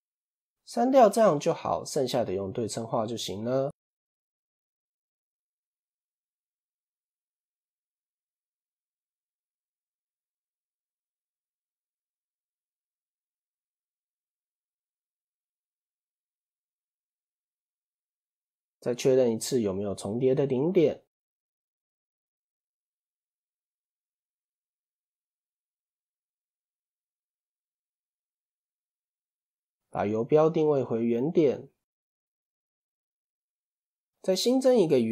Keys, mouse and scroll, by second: 1.3-1.8 scroll up 1, 1.8-4.3 shift+middle drag, 4.3 a, 5.1 click, 6.2-11.5 drag, 11.6-16.0 drag, 16.2-16.8 scroll up 2, 16.8 scroll down 1, 17.0-19.0 shift+middle drag, 19.0 a, 20.1 alt+m, 23.4 click, 24.2 click, 24.8-26.5 shift+middle drag, 26.5-27.9 scroll up 1, 27.9-28.9 shift+middle drag, 28.9 scroll down 2, 30.3 click, 31.9 shift+s, 34.5 shift+a.